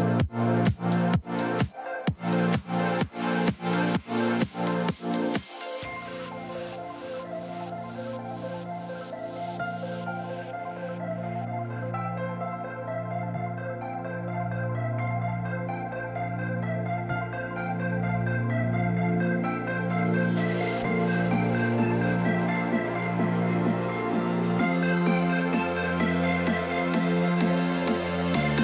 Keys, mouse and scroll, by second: 1.0 right click.